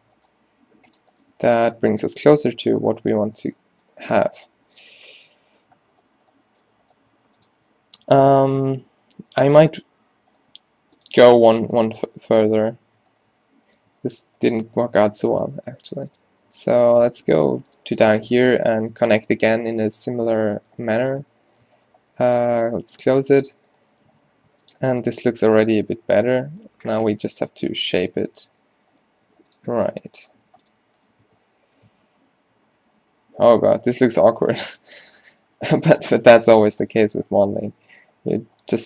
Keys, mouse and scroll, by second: 0.0-1.4 typing, 2.5 z, 3.1 z, 4.0 g, 7.2 g, 8.1 middle click, 9.3 ctrl+z, 9.5 ctrl+z, 10.7 x, 14.0 a, 15.7 e, 16.6 s, 17.1 g, 19.8 f, 20.2 right click, 20.9 f, 22.2 f, 22.6 f, 23.0 Tab, 23.3 Tab, 24.3 q, 24.8 Tab, 25.3 Tab, 25.9 Tab, 27.0 Tab, 27.8-29.2 typing, 30.4 g, 31.3 Tab, 31.9 Tab, 32.5 middle click, 34.7 q, 34.9 q, 35.1 q, 37.4 g, 38.3 g.